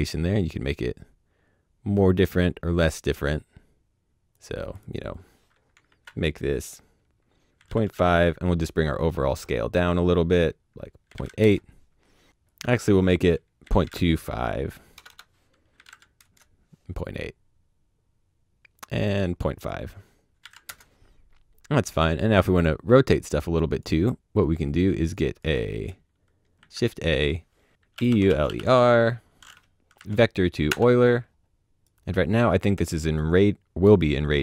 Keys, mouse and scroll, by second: 0.0 click, 5.8 ctrl+a, 7.5 KP_Decimal, 7.6 KP_5, 7.9 Tab, 11.0 KP_Decimal, 11.1 KP_8, 11.4 KP_Enter, 12.4 click, 13.6 KP_Decimal, 13.8 KP_5, 14.9 BackSpace, 15.7 KP_2, 15.8 KP_5, 16.2 KP_Enter, 19.0 click, 19.6 click, 20.3 KP_Decimal, 20.4 KP_5, 20.6 KP_Enter, 23.1 click, 26.3 a, 26.3 click, 27.9-28.5 typing, 30.0 Return, 30.6 Return, 31.1 click, 31.4 click.